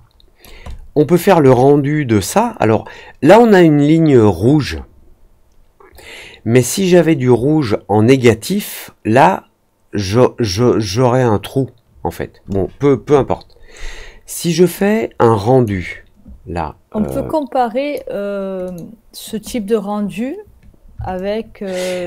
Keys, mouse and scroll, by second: 0.6 alt+middle click, 14.7-15.6 drag, 17.0-17.9 drag, 18.6 click, 21.1-22.0 alt+drag.